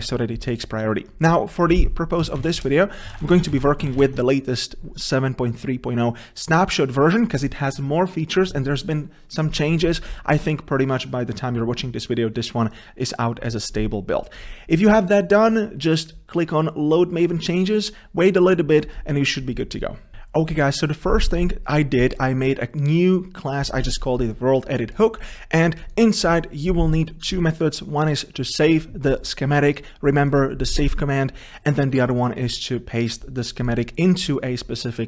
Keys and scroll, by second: 17.4 ctrl+shift+o.